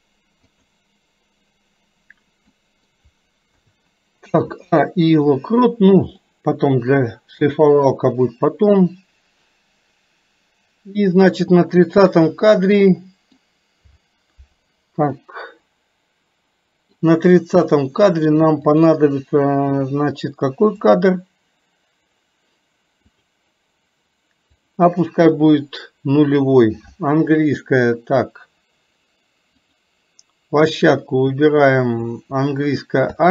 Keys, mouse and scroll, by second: 2.7 middle click, 6.3-11.8 drag, 12.4-13.5 middle drag, 15.3-17.1 middle drag, 18.8 click, 20.9 click, 23.2 click, 24.7 drag, 29.6 click.